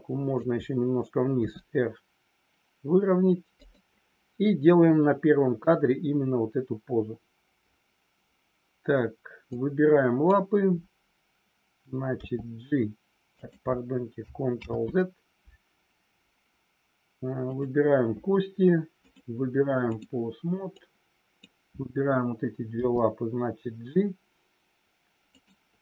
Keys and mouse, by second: 1.3 r, 3.5 click, 9.5 click, 12.1 g, 13.3 click, 14.7 ctrl+z, 19.0-20.0 drag, 20.8 click, 25.3 click.